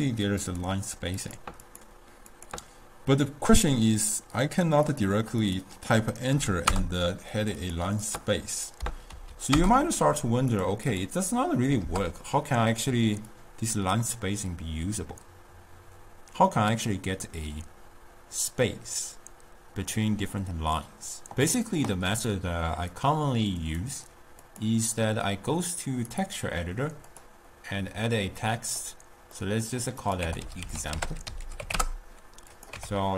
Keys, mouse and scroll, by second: 3.5-6.7 drag, 7.6-16.4 drag, 22.9-28.8 drag, 28.8-30.0 middle drag, 30.0-32.7 drag.